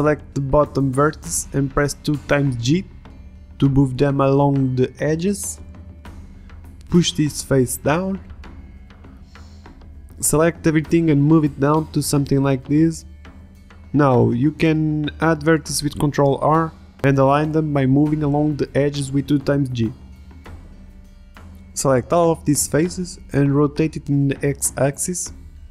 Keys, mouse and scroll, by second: 0.2 a, 0.4 b, 1.5 g, 4.0 click, 4.7 ctrl+Tab, 7.1 middle click, 7.8-9.1 drag, 9.1-10.2 middle drag, 10.2 Tab, 10.6-11.7 drag, 11.7-13.1 middle drag, 13.1 click, 13.3 Tab, 13.4 Tab, 13.8 click, 14.0 middle click, 14.4 ctrl+Tab, 14.6 g, 14.7 middle click, 14.9-15.9 drag, 15.9 click, 16.4 ctrl+r, 17.1 ctrl+Tab, 17.4 click, 17.6 g, 18.2-19.9 drag, 18.4 g, 20.3 g, 20.5 ctrl+Tab, 20.6 a, 20.7 b, 21.0 b, 22.1 ctrl+z, 23.5 r, 24.9 click.